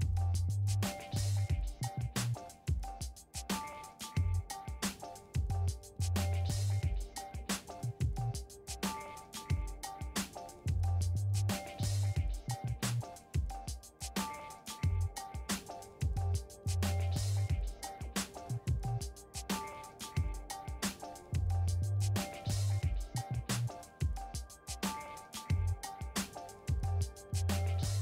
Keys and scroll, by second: 19.8-20.8 typing, 21.1 Return.